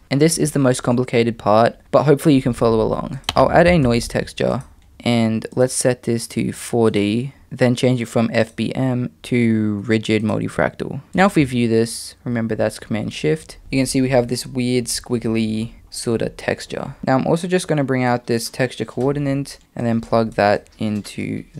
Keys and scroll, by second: 3.2 shift+a.